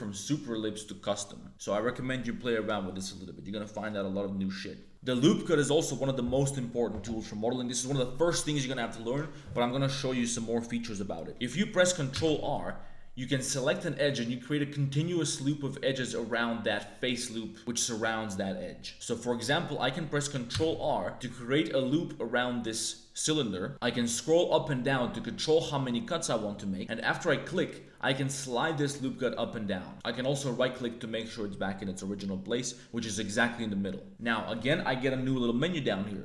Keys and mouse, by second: 0.7 click, 12.1 ctrl+r, 18.9 Tab, 19.1 click, 19.5 click, 20.5 ctrl+r, 29.9 middle click.